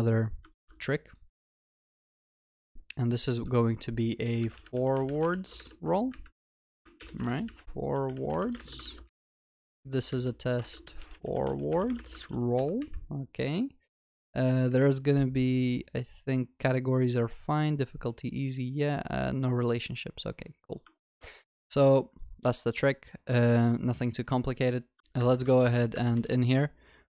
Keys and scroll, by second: 0.5 ctrl+c, 1.8 ctrl+v, 7.0 ctrl+BackSpace, 8.9 ctrl+s, 10.6 ctrl+BackSpace, 12.2 ctrl+s, 21.0 ctrl+s, 25.0 alt+F12.